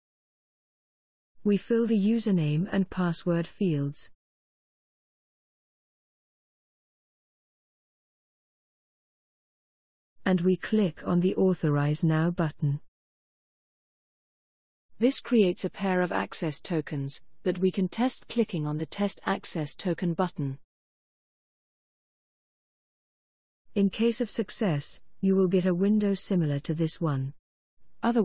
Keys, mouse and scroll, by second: 0.8-8.1 typing, 12.6 click, 21.3 click.